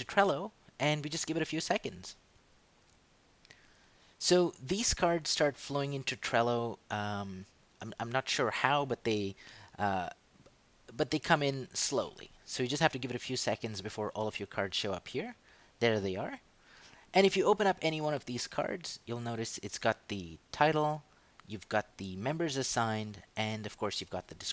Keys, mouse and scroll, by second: 0.5 click, 3.9 click, 18.9 click.